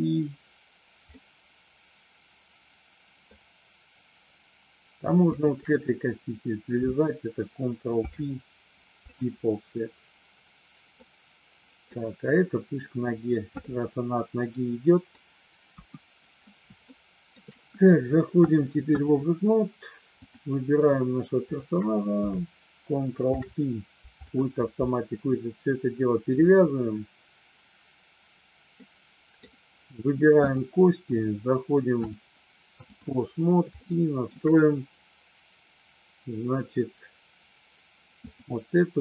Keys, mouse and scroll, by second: 1.1-3.4 middle drag, 5.2 shift+click, 8.0 ctrl+p, 11.1 middle click, 13.7-15.1 middle drag, 15.7 KP_1, 16.8 shift+middle click, 18.5 click, 20.1 click, 21.5 shift+click, 23.2 ctrl+p, 28.7 middle click, 30.4 click, 32.1 click, 33.8 shift+middle click, 38.2-39.0 drag.